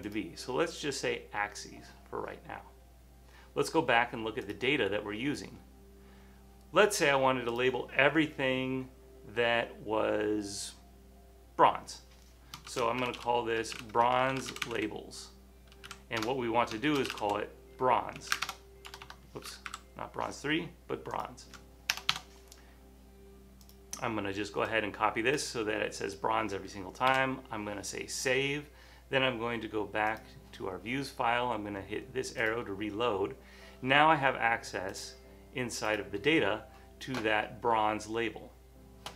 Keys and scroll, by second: 12.6-18.4 typing, 18.5 Return, 20.8-21.5 typing, 22.1 Return, 27.2 super+s.